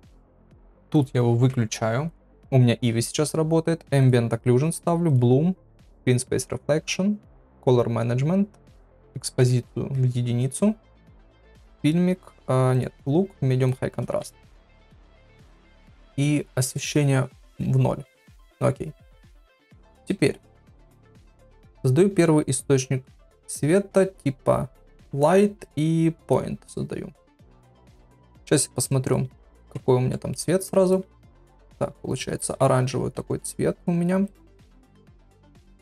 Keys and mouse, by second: 0.9 click, 4.0 click, 5.1 click, 5.9 click, 8.7-10.7 drag, 11.5-12.7 drag, 12.8-13.9 drag, 15.9 click, 16.7-18.1 drag, 19.3 KP_1, 20.8 click, 21.6 shift+a, 28.2 click, 35.7 ctrl+v.